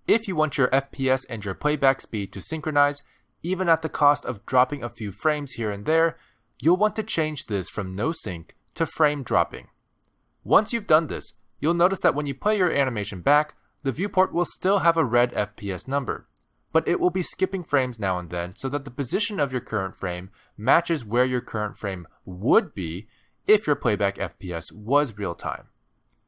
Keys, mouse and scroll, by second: 19.9 click, 22.5 click.